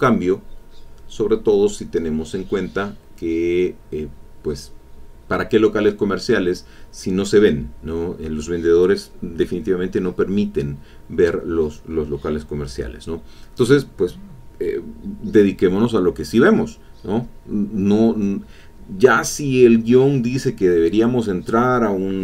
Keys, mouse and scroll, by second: 3.0 click, 4.0-6.2 drag, 6.2 middle click, 6.9 middle click, 8.3-11.3 drag, 11.4 middle click, 12.5-13.7 drag, 14.0 middle click, 14.1-15.3 drag, 17.4 click.